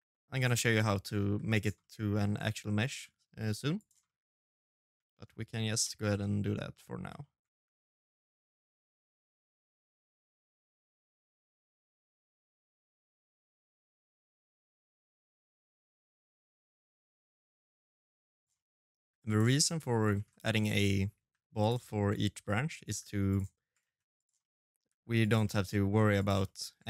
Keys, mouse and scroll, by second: 0.0 g, 0.5 middle click, 1.0 shift+d, 1.8 middle click, 2.2 s, 2.8 middle click, 3.8 shift+middle click, 4.1-4.7 scroll down 5, 4.6 middle click, 5.0 shift+middle click, 5.5 middle click, 5.9 shift+middle click, 6.6 middle click, 7.8 shift+d, 8.4 middle click, 8.7 scroll up 8, 8.9 middle click, 9.2-18.9 typing, 9.4 middle click, 9.7 middle click, 10.2 middle click, 10.7 middle click, 11.1 middle click, 11.8 middle click, 12.2 middle click, 12.4 shift+middle click, 12.6 middle click, 12.9 middle click, 13.3 middle click, 13.8 middle click, 13.9 shift+middle click, 14.3 middle click, 14.6 shift+middle click, 14.7 scroll down 4, 14.8 middle click, 15.3 middle click, 15.6 middle click, 15.8 middle click, 16.9 middle click, 17.4 middle click, 17.5 shift+middle click, 17.6 middle click, 18.0 middle click, 18.4 middle click, 19.5 middle click, 19.9 g, 20.5 middle click, 21.2 middle click, 21.6 g, 22.6 shift+d, 23.1 middle click, 23.5 g, 24.2 middle click, 24.6 g, 25.2 middle click, 25.6 shift+d, 26.6 shift+middle click.